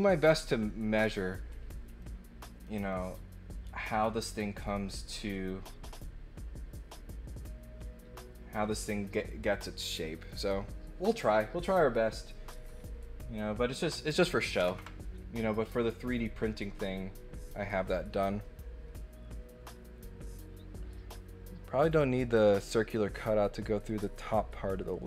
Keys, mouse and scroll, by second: 1.9 middle click, 2.9 middle click, 13.0 middle click, 13.9 click.